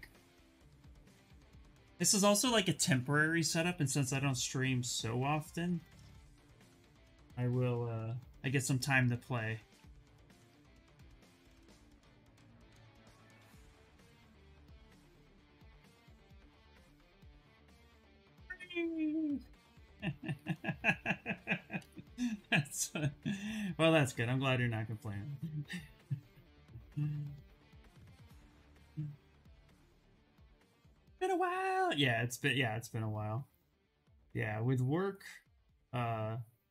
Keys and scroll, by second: 7.7 v, 8.1 s, 21.4 b, 21.9 c, 22.6 s.